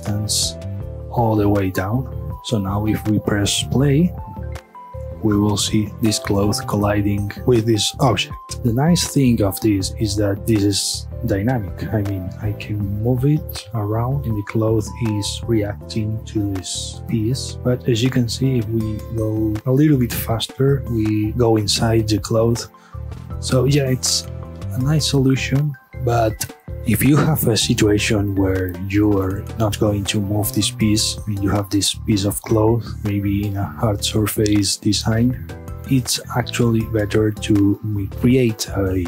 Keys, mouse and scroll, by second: 2.7-3.5 middle drag, 3.5 space, 25.8-32.3 middle drag, 32.4-39.0 middle drag.